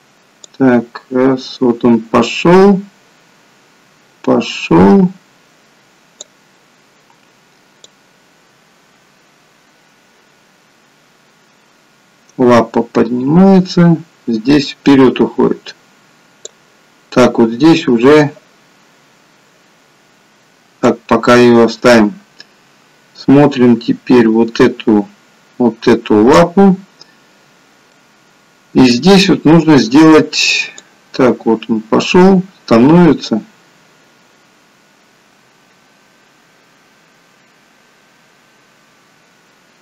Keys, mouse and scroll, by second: 0.7 click, 8.2 click, 21.0 click, 28.0 middle click, 29.3 middle click, 31.1 click.